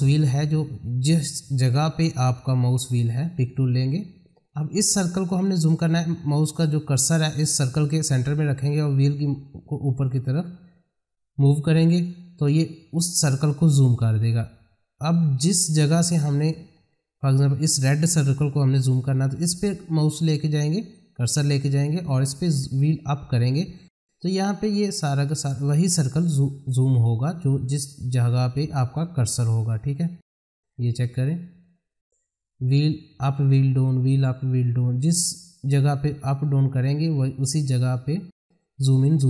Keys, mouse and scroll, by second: 2.1 scroll, 2.8 click, 3.8-5.7 scroll up 1, 9.6-10.3 scroll up 1, 15.4-16.2 scroll down 1, 16.2 middle click, 22.6-22.9 scroll up 1, 25.8 scroll down 1, 29.7-30.1 scroll up 1, 32.6-33.0 scroll up 1, 33.4-33.8 scroll up 1, 33.8-34.9 scroll down 1, 35.3-35.7 scroll down 1, 36.4-36.9 scroll up 1, 38.6-39.1 scroll down 1.